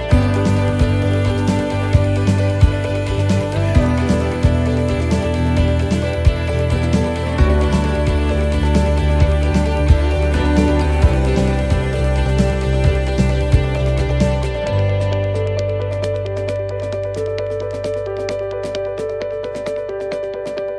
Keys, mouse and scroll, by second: 0.1 shift+right click, 0.9 shift+right click, 2.3 shift+right click, 2.3 middle click, 2.7 scroll down 1, 3.7 shift+right click, 4.5 middle click, 11.0 shift+right click, 11.0 middle click, 12.0 shift+right click, 12.7 middle click, 14.0 middle click, 14.7 middle click, 15.9 right click, 16.7 shift+right click, 17.7 shift+right click.